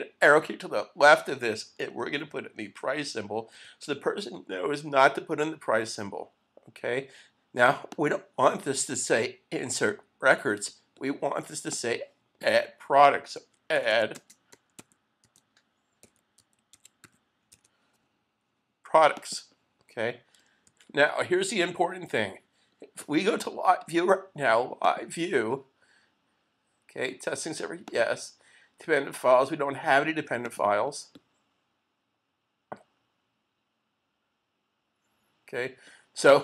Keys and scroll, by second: 0.2 Left, 3.6 shift+4.